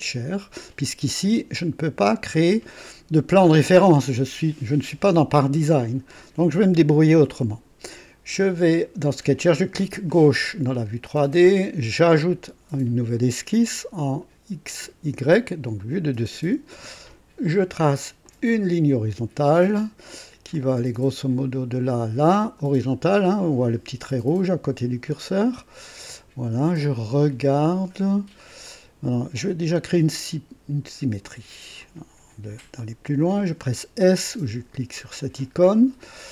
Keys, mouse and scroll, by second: 0.0 click, 10.0 click, 12.1 click, 15.7 click, 18.2 click, 20.5 click, 23.0 click, 25.6 right click, 26.9 right click, 28.4 right click, 29.7 click, 31.8 click, 32.8 click, 35.1 s.